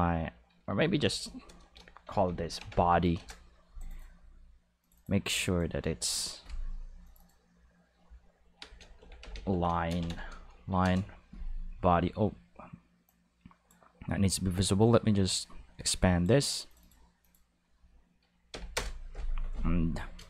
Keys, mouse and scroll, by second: 0.8 Left, 1.0 Left, 1.2 Left, 1.5 Left, 2.1 shift+b, 2.3 o, 2.6 d, 2.7 y, 3.2 Return, 3.8 click, 4.0 click, 4.8 click, 5.0 click, 5.5 click, 7.1 click, 7.2 click, 9.0-10.6 typing, 10.8 Return, 13.1 click, 14.8-16.2 drag, 16.7 click, 17.2 click, 18.5 Left, 18.8 Return.